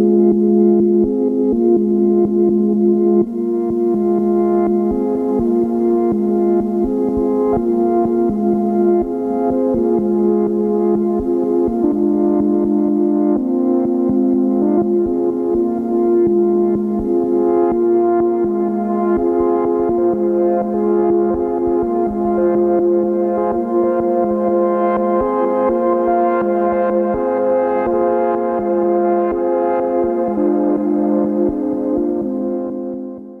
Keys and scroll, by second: 24.4 ctrl+g.